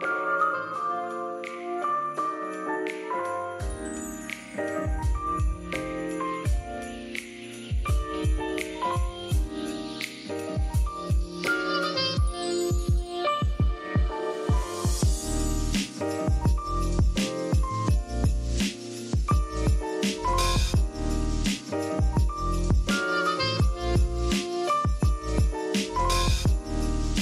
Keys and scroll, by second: 0.1-11.9 typing, 5.0 super+y, 12.0 super+g, 18.3-19.3 typing, 21.6 m, 22.9-27.0 typing.